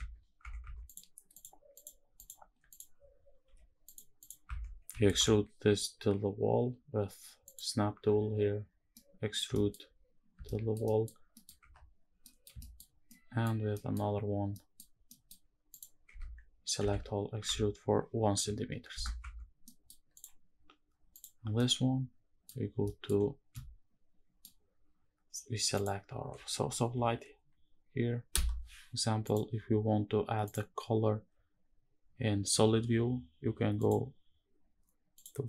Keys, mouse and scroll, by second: 0.1 Tab, 0.3 Tab, 0.6 click, 1.0 click, 1.4 click, 1.8 click, 2.4 click, 3.2 h, 3.9 click, 4.2 Tab, 4.6 a, 4.8 e, 7.2 ctrl+click, 8.7 middle click, 9.2 shift+middle click, 9.5 scroll up 1, 10.2 shift+middle click, 10.5 middle click, 10.9 scroll down 1, 11.0 middle click, 11.2 scroll up 1, 11.4 Tab, 11.9 middle drag, 12.3 shift+middle drag, 12.7 scroll up 1, 12.8 middle click, 13.2 scroll down 1, 13.4 middle click, 14.2 middle click, 14.8 middle click, 15.4 click, 15.8 Tab, 16.5 a, 17.1 e, 18.0 KP_1, 18.6 KP_Enter, 18.9 Tab, 19.4 middle click, 19.9 click, 20.8 click, 21.2-22.2 middle drag, 22.3 scroll down 1, 22.5 shift+middle click, 23.2-24.1 shift+middle drag, 25.4 shift+click, 26.6 ctrl+l, 28.9 click, 30.2 click, 33.5 click, 34.9 click.